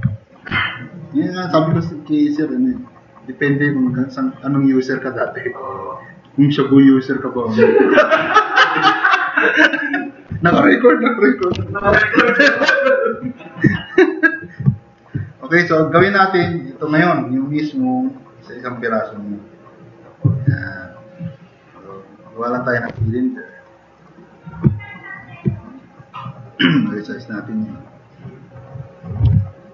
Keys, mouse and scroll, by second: 0.2 click, 0.6 click, 0.7 middle click, 13.7 drag, 26.9-27.7 drag, 29.2 t, 29.3-29.7 drag.